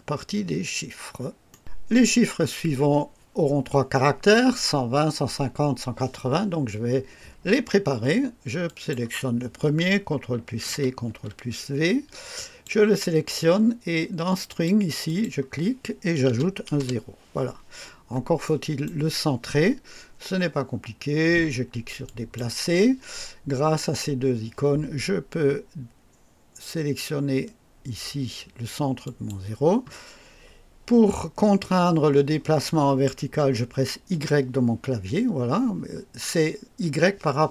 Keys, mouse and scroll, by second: 1.4 right click, 8.6 click, 10.6 c, 11.0 ctrl+v, 12.3 click, 14.4 click, 15.0 click, 16.2 KP_0, 16.7 Return, 17.8 scroll up 1, 18.4 right click, 22.0 click, 28.9 click, 34.1 y.